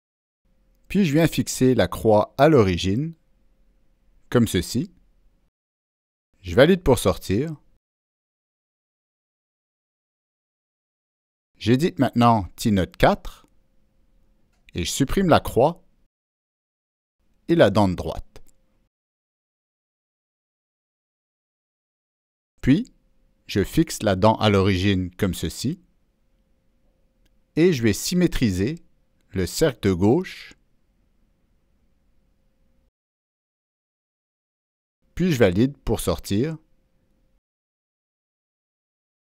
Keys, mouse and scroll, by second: 0.9 click, 0.9 Delete, 1.6-2.2 drag, 1.7 Delete, 3.4 Delete, 4.2 Delete, 4.5-5.7 drag, 7.5 click, 8.1 click, 11.4 click, 12.2 click, 14.9-17.0 drag, 18.0 Delete, 19.4 click, 21.9 Delete, 21.9-24.2 drag, 24.9 click, 26.1 click, 27.7 click, 28.9 drag, 30.7 click, 32.5 click, 35.0 click, 37.3 click.